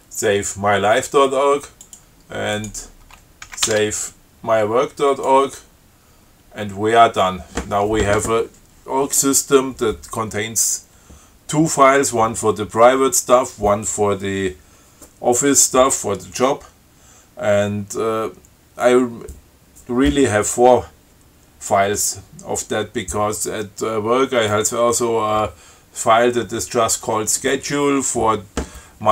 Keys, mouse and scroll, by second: 2.1 click, 2.8 click, 3.7 ctrl+x, 3.9 ctrl+s, 5.3 click.